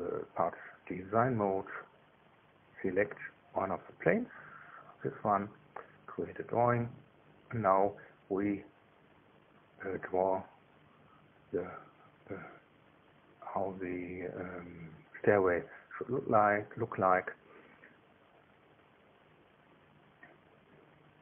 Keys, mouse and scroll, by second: 0.4 click, 2.1 click, 3.1 click, 4.4 click, 5.1 click, 6.1 click, 16.7 click.